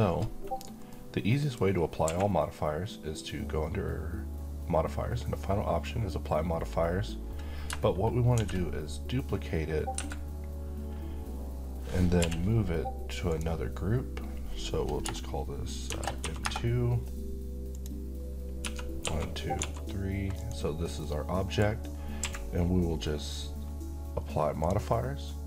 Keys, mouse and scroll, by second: 2.0 q, 8.4 shift+d, 9.9 Escape, 12.2 m, 13.3 click, 15.8 shift+m, 16.2 2, 16.4 Return, 17.7 click, 18.6-19.6 typing, 20.4 click, 21.0-21.6 middle click, 21.9-22.2 scroll up 1, 22.2 q, 24.6 click.